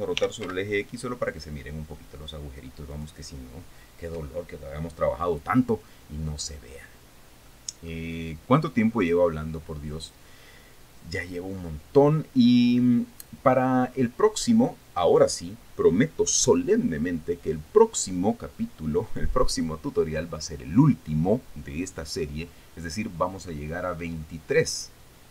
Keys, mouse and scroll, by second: 0.5-1.5 typing, 3.4 click, 6.0-6.4 scroll down 2, 6.8-7.1 scroll down 2, 8.0 middle click, 9.6 click, 10.6 click, 11.4 scroll down 2, 12.2-14.3 middle drag, 14.4-14.9 scroll up 2, 15.0 scroll up 2, 17.3-17.9 scroll down 4.